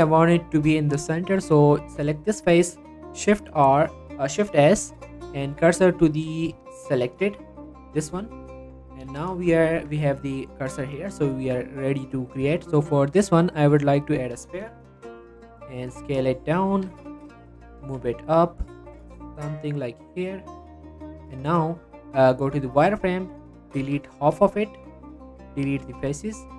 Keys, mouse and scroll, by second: 1.6 click, 3.3 shift+s, 5.7 click, 6.5 shift+s, 7.3 shift+s, 8.4 scroll down 1, 9.4 middle click, 9.6 scroll up 1, 9.8 Tab, 10.8-11.2 scroll down 1, 11.2 middle click, 12.4 shift+a, 14.0 click, 15.4-15.8 scroll up 1, 16.1-16.5 scroll down 2, 16.3 shift+middle click, 16.5 scroll up 1, 16.7 s, 17.4 click, 17.5 g, 17.8 z, 20.4 click, 20.6 Tab, 20.8 z, 23.2 click, 23.6 scroll up 2, 23.8 z, 24.2 x, 25.2 ctrl+z, 25.4 x, 26.3-26.5 shift+middle drag.